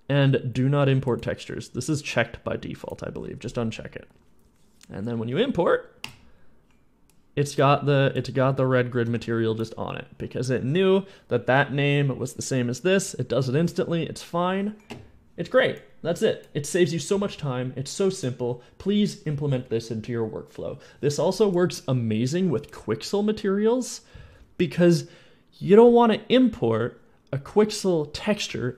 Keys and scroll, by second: 8.2 a, 8.9 d.